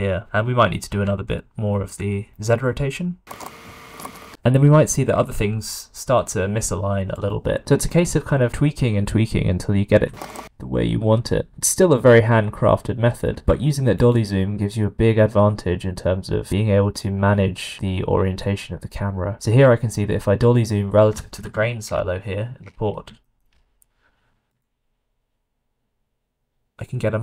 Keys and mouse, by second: 0.8 r, 3.4 s, 7.1 middle click, 9.8 r, 13.5 q, 24.1 q.